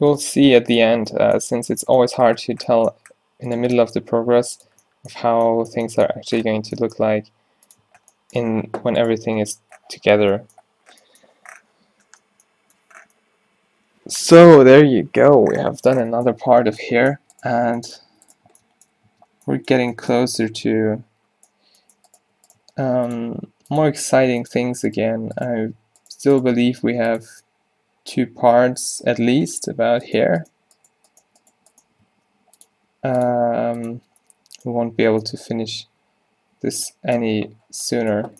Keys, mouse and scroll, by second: 0.3 g, 1.0 Tab, 2.5 Tab, 4.1 g, 4.8 Tab, 5.4 Tab, 7.1 g, 7.9 Tab, 8.6 middle click, 9.3 Tab, 9.6 Tab, 10.1 middle click, 16.6 Tab, 17.3 Tab, 17.7 Tab, 18.1 Tab, 18.5 Tab, 19.1 Tab, 20.3 Tab, 22.7 g, 23.3 r, 24.2 r, 26.6 g, 27.3 Tab, 29.2 Tab, 32.2 g, 32.8 r, 33.4 g, 34.0 Tab.